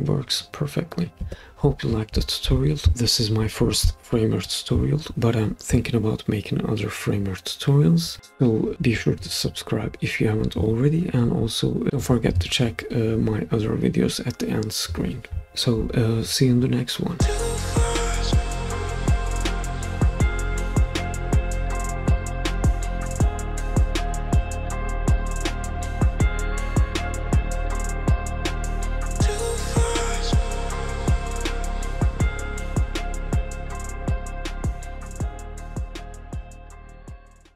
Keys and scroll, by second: 1.2 Escape.